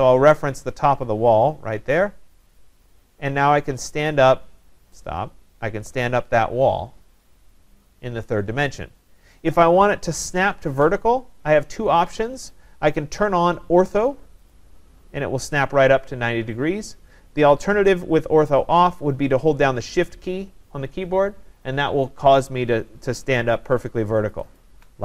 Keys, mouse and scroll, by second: 2.6 click, 14.5 click, 18.0 click, 24.6 shift+click.